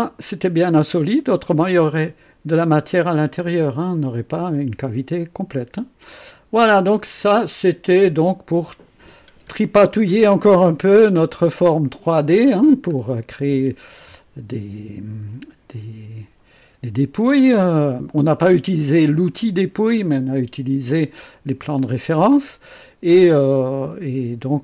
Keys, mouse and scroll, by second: 0.8 click, 1.9 click, 4.1-7.1 drag, 7.2-8.5 drag, 10.1-11.7 drag, 12.9 scroll down 1, 12.9 typing, 21.7-24.6 drag.